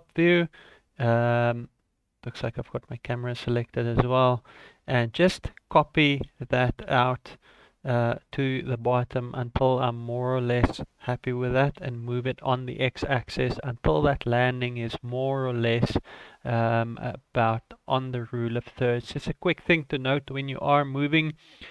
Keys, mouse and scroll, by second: 1.9 right click, 2.2 click, 3.1 shift+click, 5.5-5.9 scroll down 2, 6.3 shift+d, 11.5 g.